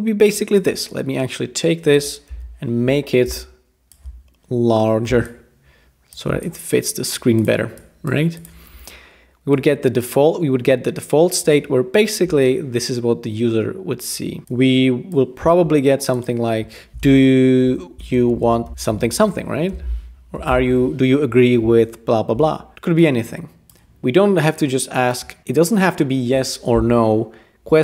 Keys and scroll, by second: 2.3 typing, 16.7-19.7 typing, 20.5 alt+h.